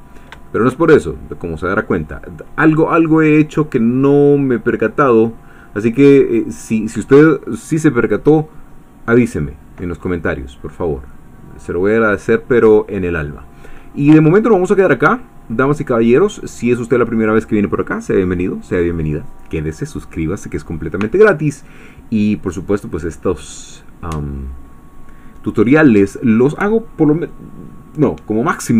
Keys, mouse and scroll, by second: 0.3 shift+middle click, 0.5 shift+click, 1.2 click, 10.7-12.9 drag, 13.1 scroll up 1, 13.6-13.9 scroll down 1, 14.3 ctrl+click, 15.2 ctrl+scroll up 1, 15.7-28.7 drag.